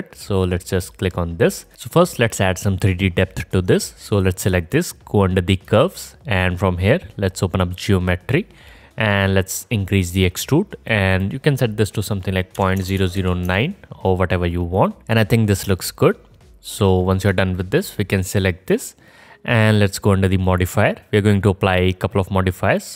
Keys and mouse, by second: 0.8-1.7 middle drag, 0.8-1.7 right drag, 4.1 middle click, 4.2-5.5 drag, 5.5 middle click, 5.6-6.8 drag, 6.8-7.6 right drag, 7.6-14.8 middle drag, 12.9 KP_0, 14.8 alt+right click, 15.8-17.8 alt+drag, 17.8 middle click, 17.9-20.5 drag, 20.5 middle click, 20.7-22.5 drag, 22.5-22.9 middle drag.